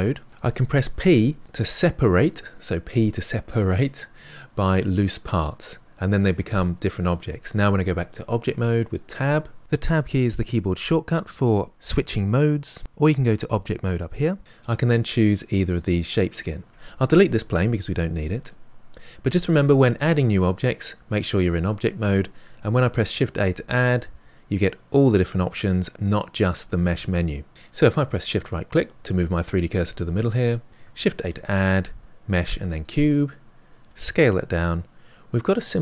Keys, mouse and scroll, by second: 0.2 middle click, 0.3 a, 0.9 p, 13.2-14.4 drag, 14.6 click, 15.2 click, 15.6 click, 17.5 Delete, 19.3-22.3 middle drag, 23.2 shift+a, 28.1 shift+right click, 31.2 shift+a, 33.8 s.